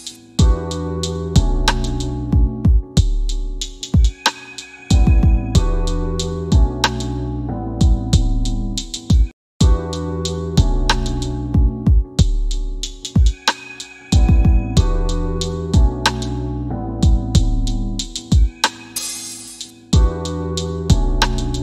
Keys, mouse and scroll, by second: 2.2 click, 5.8 KP_5, 6.3 KP_Enter.